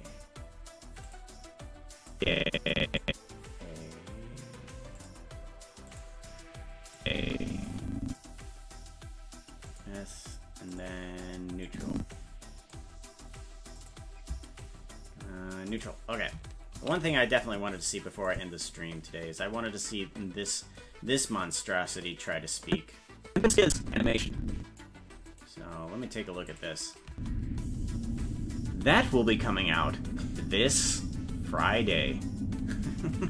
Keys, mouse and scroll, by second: 1.1 click, 2.2 click, 5.0 click, 5.9 click, 7.0-8.2 drag, 9.7 click, 10.7 click, 11.7-12.8 drag, 13.8 click, 15.8 click, 17.2 ctrl+s, 18.3 click, 21.1 scroll down 1, 21.9 scroll down 7, 22.7-24.8 drag, 25.4 right click, 26.5 click, 27.1 space.